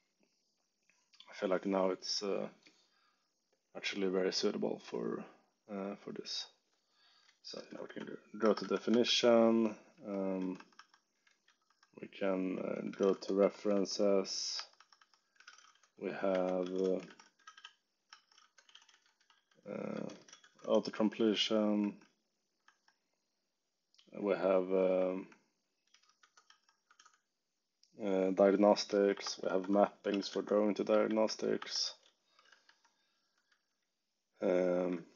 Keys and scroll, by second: 7.8 g, 8.4 Escape, 8.6 g, 9.9 j, 10.3 k, 10.5 Escape, 11.2 ctrl+o, 11.6-22.6 typing, 14.5 Escape, 24.2 b, 25.8-26.9 typing, 28.5-35.1 typing, 30.0 alt+9.